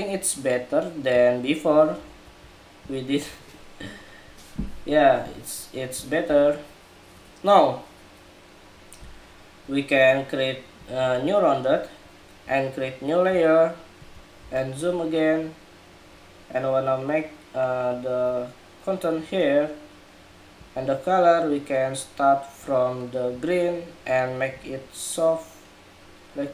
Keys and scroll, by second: 1.9 super+-, 14.1 super+=.